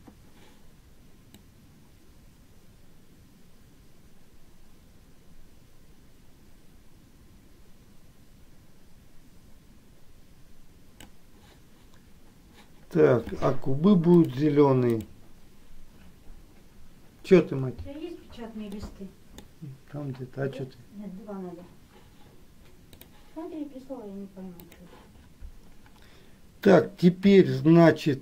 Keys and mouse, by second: 1.7-11.4 drag, 15.0 click, 19.0 middle click.